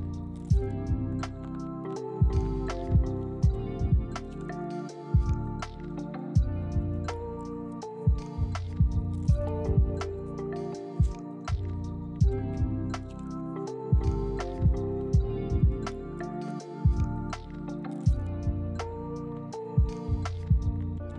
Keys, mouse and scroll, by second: 0.9 z, 3.5 g, 4.2 ctrl+click, 5.4 g, 6.6 ctrl+click, 8.0 g, 8.8 ctrl+click, 9.4 z, 12.2 z, 15.2 g, 16.7 ctrl+click, 18.5 g, 19.7 ctrl+click, 20.2 z, 20.7 z.